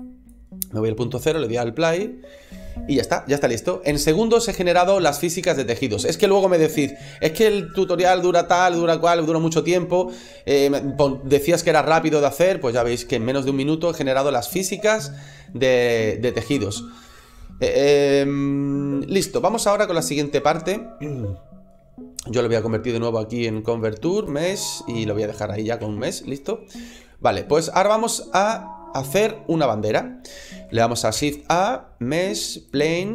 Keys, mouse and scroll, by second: 1.0 click, 19.8 shift+space, 22.0 click, 24.9 shift+middle click, 25.3 middle click, 25.7 shift+middle click, 26.2 middle click, 26.6 scroll up 2, 27.0 shift+middle click, 28.2 right click, 31.0 shift+a.